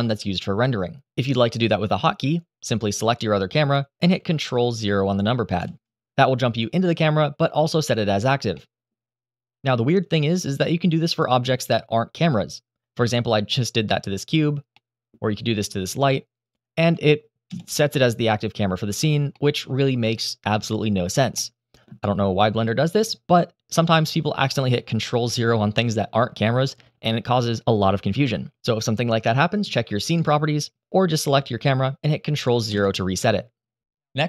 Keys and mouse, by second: 0.9 click, 2.8-3.8 drag, 5.3 ctrl+KP_0, 8.3-8.6 middle drag, 9.8 click, 10.8 ctrl+KP_0, 13.2 middle drag, 14.5-14.8 middle drag, 16.2 click, 17.2 ctrl+KP_0, 19.1-19.4 middle drag, 20.2 middle drag, 21.1-21.6 middle drag, 32.4 ctrl+KP_0.